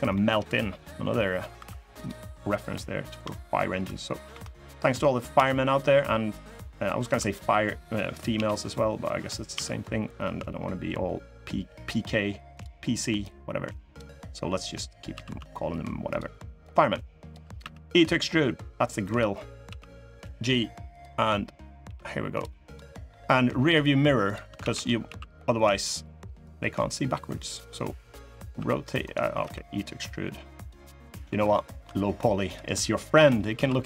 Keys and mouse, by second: 0.9 middle click, 1.3 3, 1.7 click, 4.0 i, 12.9 click, 14.8 s, 16.4 click, 17.3 e, 19.4 g, 21.6 g, 22.6 middle click, 24.0 click, 24.3 shift+d, 24.8 s, 26.2-27.3 drag, 28.3 r, 29.1 e, 30.6 click, 31.3 shift+click, 32.9 l, 33.3 s.